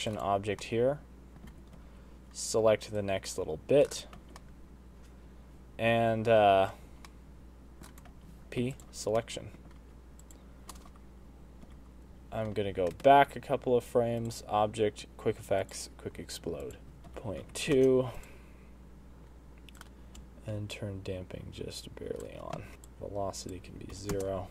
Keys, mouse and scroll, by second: 0.4 Tab, 0.6 middle click, 1.4 z, 1.8 c, 4.1 z, 4.5 middle click, 6.4 z, 6.8 c, 8.1 z, 8.2 middle click, 8.5 p, 9.1 middle click, 9.8 Tab, 10.2 click, 11.7 Left, 12.8 Left, 12.8 middle click, 13.3 Right, 14.2 click, 16.6 click, 16.8 click, 16.8-17.7 scroll down 10, 18.1 click, 20.2 click, 22.5 space, 22.7 click, 22.7 scroll up 4, 24.1 click.